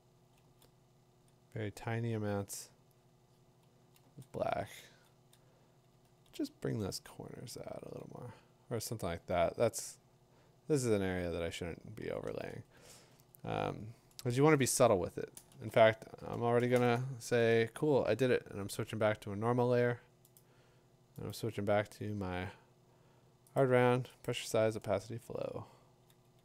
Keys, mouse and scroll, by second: 0.0-0.4 typing, 3.7-6.6 typing, 7.8 [, 10.6 [, 12.2 ], 12.8 ], 13.1 ], 15.5 ctrl+shift+n, 19.5 b, 20.4 right click, 21.3 right click, 22.1-22.5 middle click, 22.9 middle click, 22.9 middle click, 23.6 click, 24.2 click.